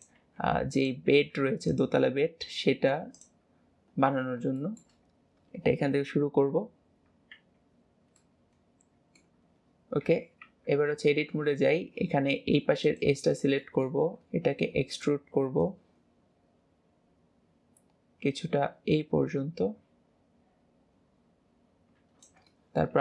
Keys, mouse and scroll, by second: 4.2-4.6 scroll down 7, 4.6-5.2 shift+middle drag, 5.2-8.2 scroll up 1, 8.2-10.1 middle drag, 10.1 KP_7, 10.5 Tab, 11.0 scroll up 2, 12.9 click, 13.6 middle click, 14.5 e, 15.6 click, 22.5 shift+middle click.